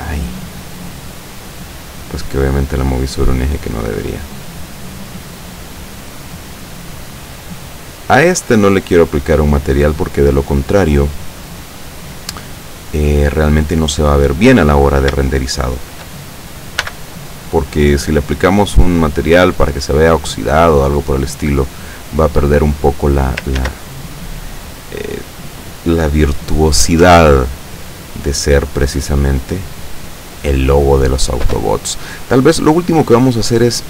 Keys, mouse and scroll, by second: 0.3-1.9 middle drag, 3.0-9.6 drag, 9.8-10.8 middle drag, 11.2-11.8 middle drag, 11.8 scroll up 1, 12.5 click, 13.5-14.6 middle drag, 14.8 scroll down 1, 15.4-16.0 shift+middle drag, 16.8 n, 20.3 click, 22.2-23.5 middle drag, 23.7 ctrl+s, 24.0 ctrl+click, 27.1 F12, 28.6 scroll down 2, 31.3 scroll down 2, 33.7 click.